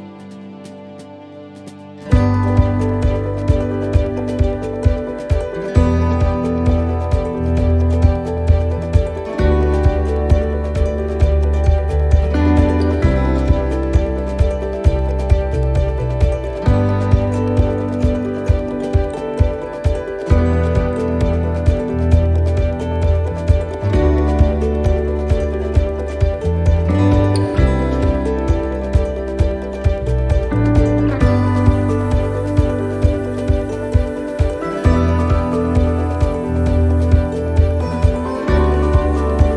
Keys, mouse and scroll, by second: 0.1 middle click, 1.0 click, 2.8 middle click, 3.8 middle click, 4.8 click, 8.1 shift+middle click, 8.4-8.8 scroll down 2, 8.9 shift+middle click, 12.3 click, 13.5 middle click, 15.3 click, 17.2 middle click, 18.7 middle click, 19.7 click, 22.4 middle click, 23.0-23.4 scroll up 2, 23.4 shift+middle click, 24.7 shift+middle click, 25.9 middle click, 28.6 scroll down 2, 29.1 middle click, 30.4 middle click, 31.1 click, 33.7 click, 34.6 middle click, 37.0 scroll down 1, 37.4 shift+middle click, 38.0 middle click, 39.0 click.